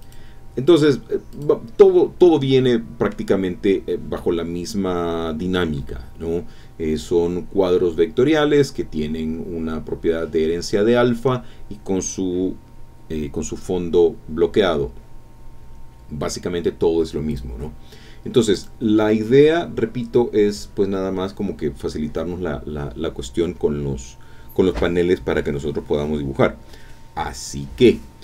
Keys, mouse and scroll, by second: 0.0 click, 0.7 click, 1.3 click, 2.5 click, 3.4 scroll up 2, 3.9 scroll down 2, 9.9 scroll down 2, 10.7 scroll down 2, 17.3 click, 18.5 click.